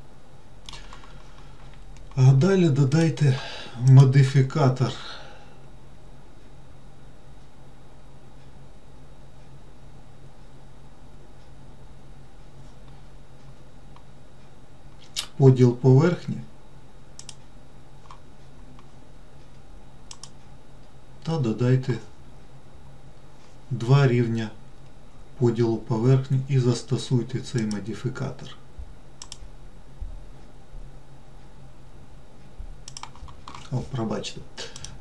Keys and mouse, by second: 0.2 middle click, 3.3 click, 4.3-17.7 drag, 27.9-33.5 drag.